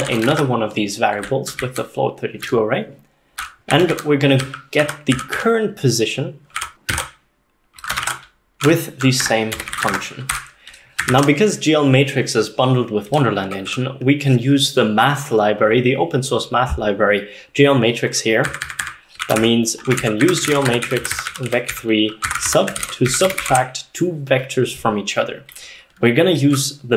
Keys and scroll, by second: 0.0-2.5 typing, 3.5-5.4 typing, 6.6-10.9 typing, 9.3 Tab, 11.2 ctrl+s, 13.5-14.2 typing, 18.5 Tab, 18.5-24.0 typing, 18.7 Tab, 18.9 Tab.